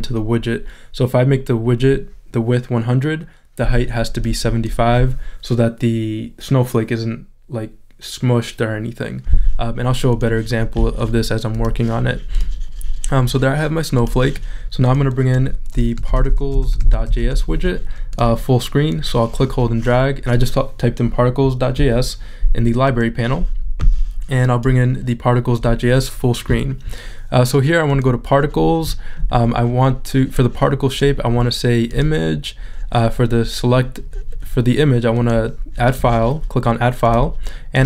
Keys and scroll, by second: 16.0 p, 18.2 s.